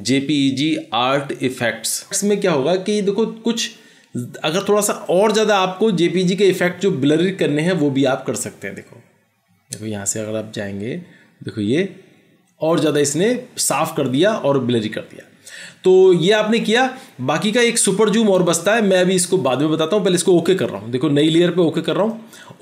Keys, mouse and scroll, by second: 18.7-19.1 scroll down 1.